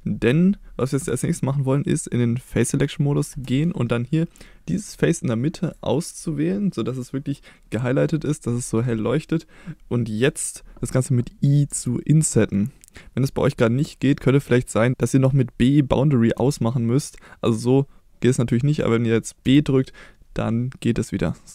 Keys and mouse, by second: 3.3 3, 5.6 click, 11.7 i, 16.3 b.